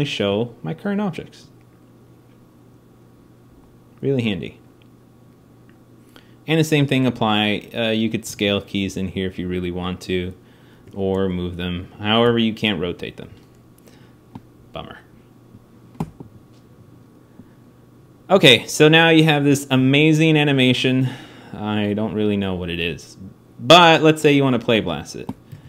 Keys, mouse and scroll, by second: 6.5 a, 6.9 a, 9.1 a, 9.1 s, 10.9 g, 19.5 alt+a, 25.4 alt+a.